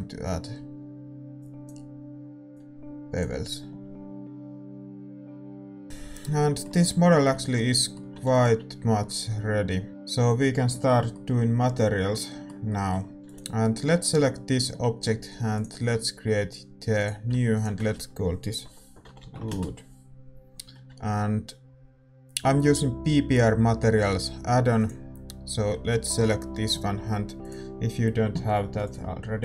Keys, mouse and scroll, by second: 1.4-4.8 drag, 5.8-17.0 middle drag, 9.2 ctrl+s, 13.6 ctrl+s, 13.6-17.0 right drag, 17.0-19.4 drag, 19.4 o, 24.8-29.4 drag.